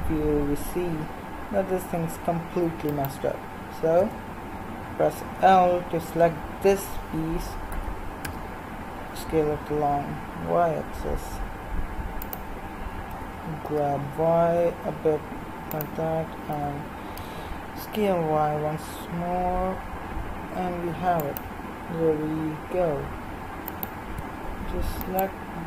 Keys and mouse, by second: 2.9-4.0 right drag, 4.0 l, 7.7 s, 13.1 g, 16.5 s, 23.7-25.6 right drag.